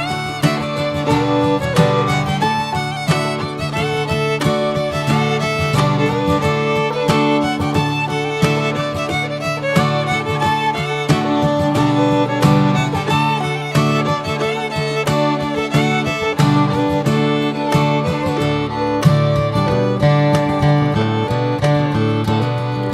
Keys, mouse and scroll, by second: 9.4 Tab, 10.3 click, 11.4 s, 12.7 click, 13.0 scroll down 2, 13.5 alt+middle click, 14.2-15.0 middle drag, 15.0 alt+h, 15.3 drag, 15.9 click, 16.4 alt+middle click, 17.0-17.7 shift+middle drag, 17.7 r, 19.6 alt+middle drag, 20.2 alt+middle click, 21.1-21.5 scroll down 2, 22.0 alt+middle drag.